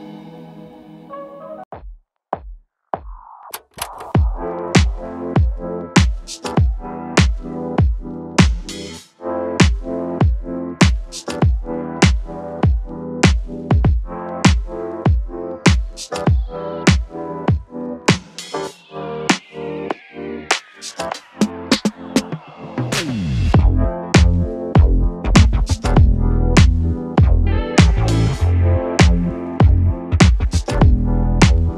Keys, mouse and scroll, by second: 19.6 click, 19.7-21.0 drag, 21.1 space, 27.2 space, 28.7 click.